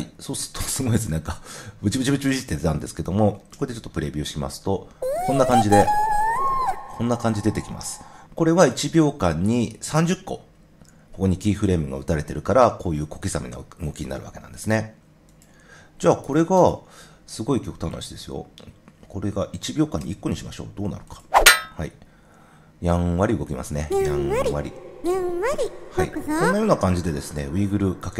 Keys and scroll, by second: 3.5 0, 16.2 super+z, 19.9 i.